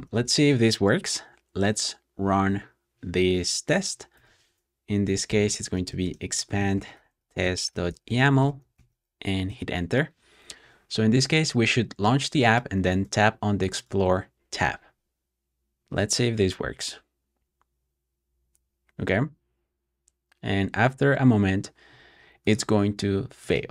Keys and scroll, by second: 0.0 super+j, 3.3 BackSpace, 3.6 BackSpace, 4.7-9.0 typing, 9.3 Return, 16.3-17.1 typing.